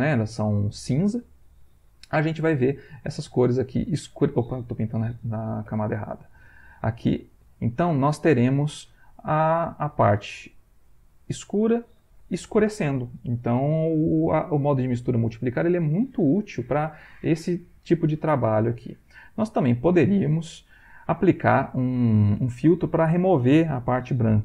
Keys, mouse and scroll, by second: 2.3-3.8 drag, 5.0 ctrl+z, 6.6 click, 7.3-9.0 drag, 9.7-15.8 drag, 15.8-18.0 drag, 18.3 middle click, 19.0 ctrl+click, 19.9-21.1 ctrl+drag, 21.3 click, 21.6 ctrl+click.